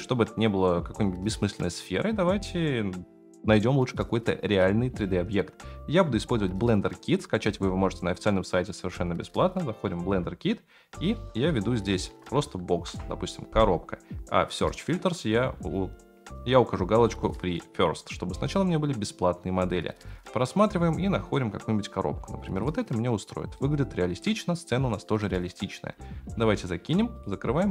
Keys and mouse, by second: 9.8 click, 11.3-12.9 drag, 14.8 click, 17.5-18.2 drag, 27.1-27.7 drag.